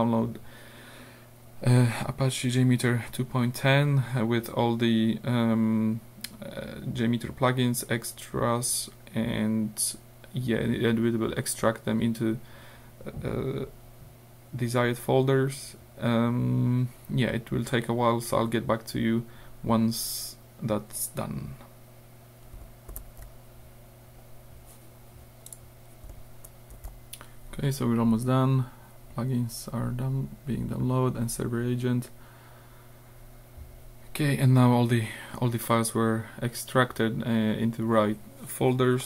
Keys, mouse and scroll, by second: 23.0 ctrl+alt+r, 25.5 click, 26.7 ctrl+alt+r.